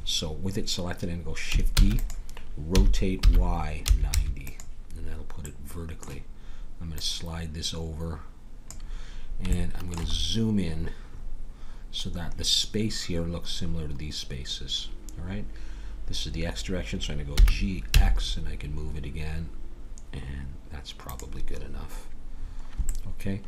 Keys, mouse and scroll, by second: 1.7 shift+d, 2.7 r, 6.9-9.5 drag, 9.5-17.3 middle drag, 17.3 g.